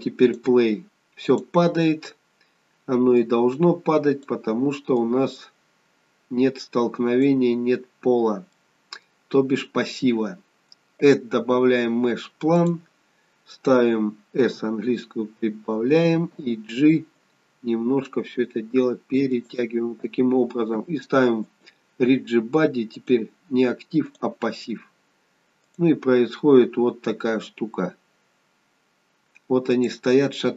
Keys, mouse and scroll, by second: 0.1 click, 1.3 click, 3.1 click, 5.0 click, 8.5 middle click, 9.2-10.0 scroll down 1, 10.0 scroll down 1, 11.0 click, 14.4 s, 17.3 g, 21.4 click, 22.9 click, 25.6 click, 29.6 click.